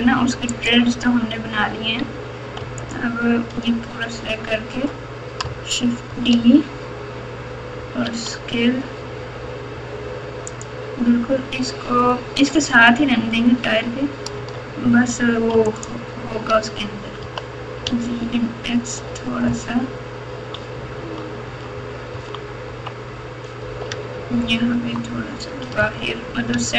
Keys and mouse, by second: 0.5 click, 1.0 Tab, 2.8 alt+click, 6.1 shift+d, 14.3 1, 15.7 alt+click, 17.2 g, 23.9 Tab, 24.7 Tab, 25.8 g.